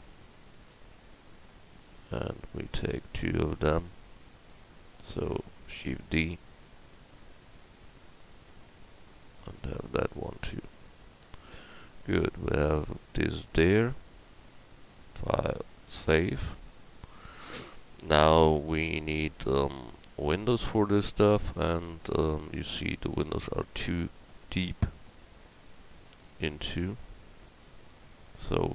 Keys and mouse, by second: 0.8-2.9 middle drag, 5.7 shift+d, 6.3-8.7 drag, 13.8 a, 21.3 Tab, 22.0 Tab, 22.4 Tab.